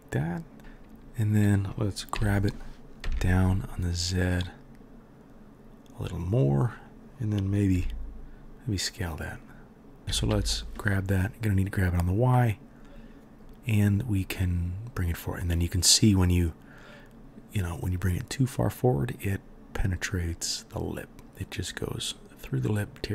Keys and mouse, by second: 2.1 g, 7.7 s, 10.3 g.